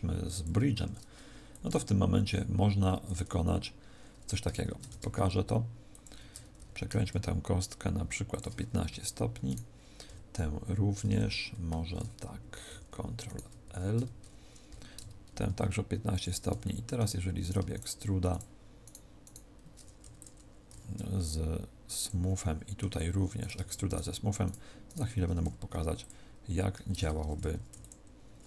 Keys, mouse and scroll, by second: 0.6 Tab, 1.4 click, 4.6 shift+d, 6.0 ctrl+click, 6.5 r, 8.3 ctrl+click, 8.8 a, 9.4 right click, 10.6 shift+l, 11.6 Escape, 12.6 ctrl+l, 13.2 right click, 13.6 ctrl+l, 14.6 r, 16.2 ctrl+click, 16.6 middle click, 17.4 right click, 17.6 shift+right click, 18.2 right click, 19.3 shift+right click, 20.0 e, 20.2 click, 20.6 w, 22.3 middle click, 23.3 right click, 23.8 shift+right click, 24.4 right click, 25.4 w, 26.9 ctrl+z, 27.6 e, 27.8 click.